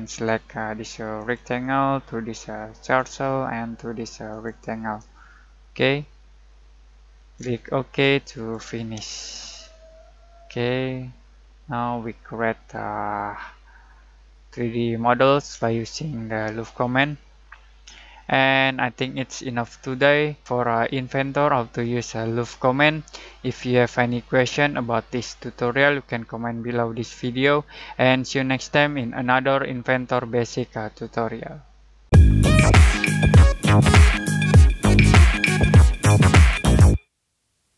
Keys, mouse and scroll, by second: 5.2-8.0 alt+shift+middle drag, 8.0 alt+click, 9.1-16.3 alt+shift+middle drag, 16.3-16.8 alt+scroll up 1, 16.8 alt+scroll down 1, 17.8 alt+middle click, 18.6 alt+scroll up 1.